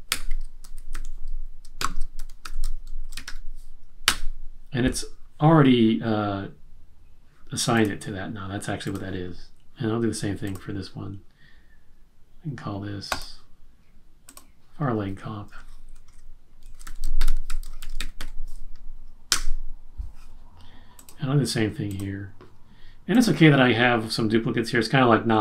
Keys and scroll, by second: 0.1-3.7 typing, 16.2-18.6 typing.